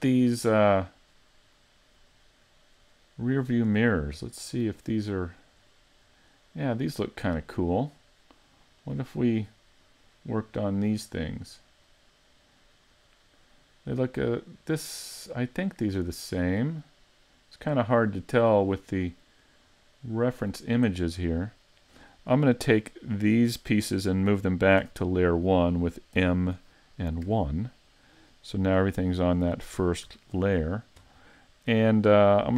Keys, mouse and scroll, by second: 0.0 scroll up 4, 0.5 middle click, 1.1-1.5 scroll up 2, 1.6 middle click, 3.4 middle click, 4.1-4.4 scroll down 4, 4.5 middle click, 5.2-5.7 scroll up 2, 5.7 middle click, 6.2-6.6 scroll up 2, 8.0 scroll up 2, 8.4 middle click, 9.0 scroll up 2, 9.5 middle click, 10.0-11.1 scroll up 1, 11.1 scroll down 2, 11.9 middle click, 16.8-17.4 scroll up 1, 17.4-17.8 scroll down 1, 17.8 middle click, 22.8 click, 24.8 a, 26.2 m, 29.3 click, 30.1 a, 31.4 middle click, 32.3 shift+middle click.